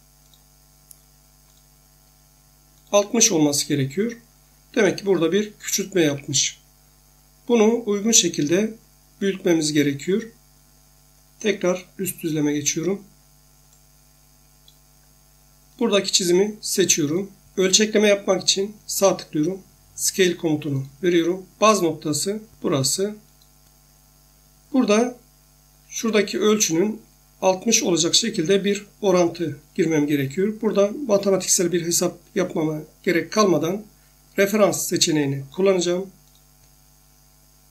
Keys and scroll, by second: 6.0 Escape.